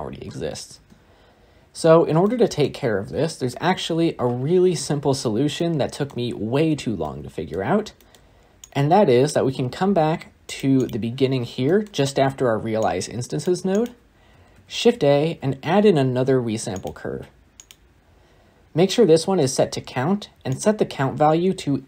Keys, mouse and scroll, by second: 0.6 space, 1.6 space, 2.1-3.0 shift+middle drag, 3.0 space, 16.7 shift+a.